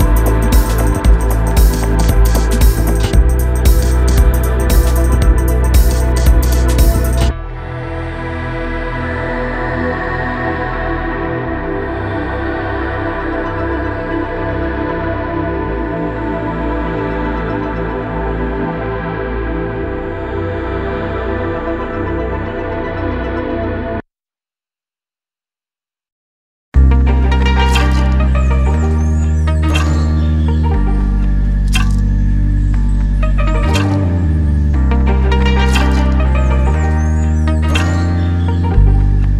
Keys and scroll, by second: 10.1 Escape, 11.1 F3, 17.8 Escape, 19.2 F2, 21.1 Escape, 23.5 Escape.